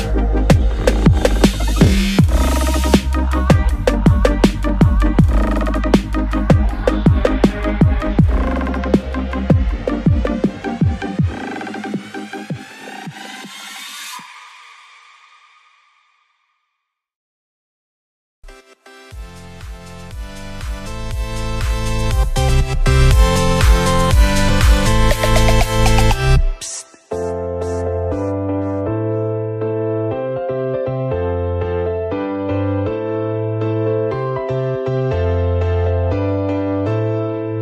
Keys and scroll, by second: 5.5 ctrl+0, 7.4 ctrl+c, 7.5 ctrl+v, 17.9 Down, 32.5 ctrl+=.